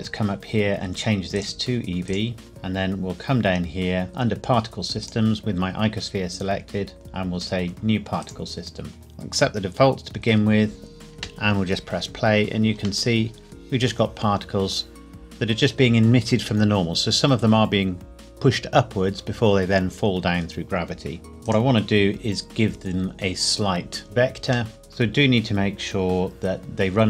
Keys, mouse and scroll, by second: 1.4 click, 5.0 click, 8.2 click, 11.1 space, 13.1 middle click, 21.5 click, 24.0-24.7 scroll down 1, 24.7 middle click.